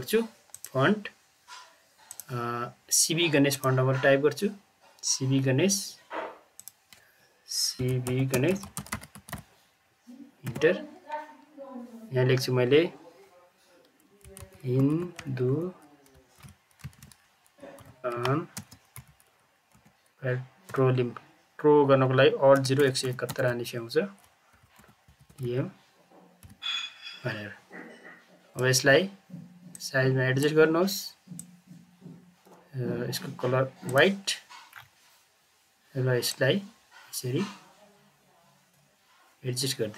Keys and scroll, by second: 7.8-9.8 typing, 10.4 Return, 14.0-20.6 typing, 16.3 ctrl+z, 22.5 alt+0, 22.7 alt+1, 23.0 alt+7, 23.2 alt+1, 24.3-26.4 typing.